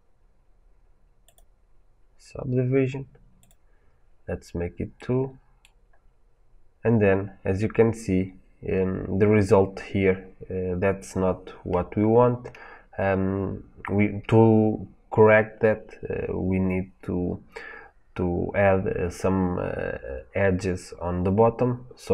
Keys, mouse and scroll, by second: 4.8 middle click, 5.8 scroll up 1, 12.4 scroll up 1.